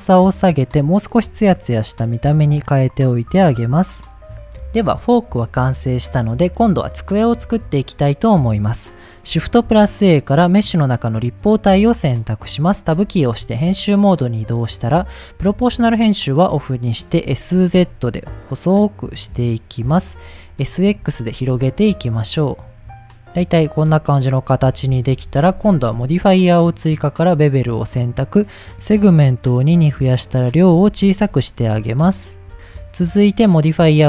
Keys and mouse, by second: 1.7-3.3 drag, 9.6 shift+a, 12.9 Tab, 13.8 middle click, 15.0 click, 15.8 middle click, 17.2 s, 17.7 z, 19.9 click, 20.6 middle click, 21.0 s, 21.3 x, 22.8 click, 23.7 middle click, 24.6 middle click, 25.1 Tab, 26.6 click, 27.7 click, 28.5-30.4 drag, 31.0 shift+middle click, 31.5 middle click.